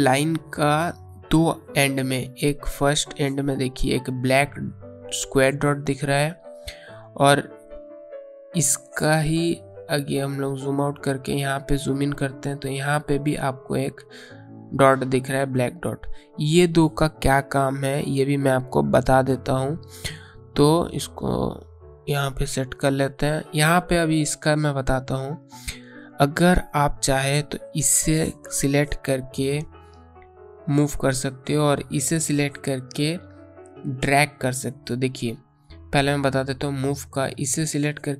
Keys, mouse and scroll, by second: 3.7-5.9 scroll up 1, 9.8 scroll down 1, 10.6-11.4 scroll down 1, 12.2-12.7 alt+scroll up 2, 13.0 alt+scroll down 1, 13.2 alt+scroll up 1, 17.7 alt+scroll down 1, 18.5-18.9 scroll down 1, 18.9 space, 19.2 click, 19.4 space, 21.5 click, 37.7 click.